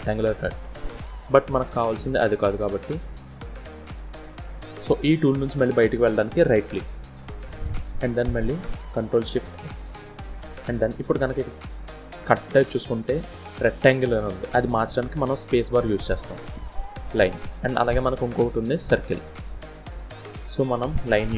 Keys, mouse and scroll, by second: 2.1 middle click, 3.5 KP_1, 8.8 ctrl+shift+x, 21.1-21.3 scroll up 1.